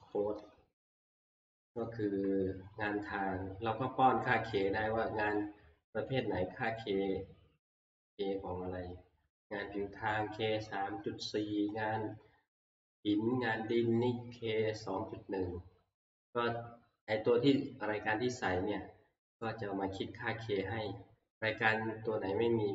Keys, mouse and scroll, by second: 0.2 click, 1.5 scroll, 2.6 scroll, 5.4 click, 6.2 click, 6.8 click, 8.0 click, 15.0 scroll, 15.1-16.4 scroll up 4, 16.4-17.0 scroll up 1, 17.0-18.3 scroll up 1, 18.3-19.6 scroll up 1, 19.6-20.2 scroll up 1, 20.2 scroll down 4.